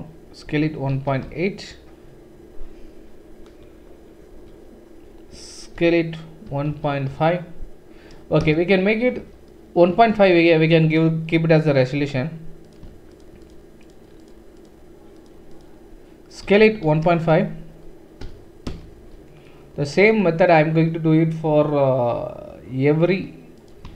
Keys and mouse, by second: 0.4 s, 5.7 s, 11.5 alt+click, 11.6 typing, 13.0 shift+middle click, 13.4 shift+click, 13.5-14.6 shift+middle drag, 14.6 shift+click, 16.4 s, 23.6 click.